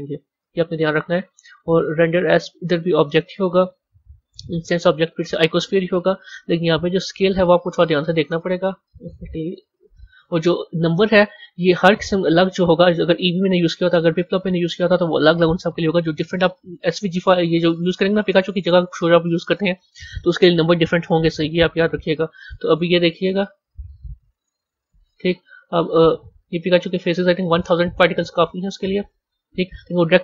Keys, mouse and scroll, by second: 0.7 scroll down 3, 1.9-3.5 drag, 3.5 scroll down 2, 4.3-7.3 drag, 8.5 z, 10.7-11.1 scroll up 10, 11.7-12.3 scroll up 1, 12.3-15.3 middle drag, 18.7 a, 19.3 click, 22.6 click, 25.8 a, 26.1-27.2 middle drag, 27.2 scroll up 3, 27.8 middle click, 28.7-30.0 scroll down 3, 30.0-30.2 scroll down 10.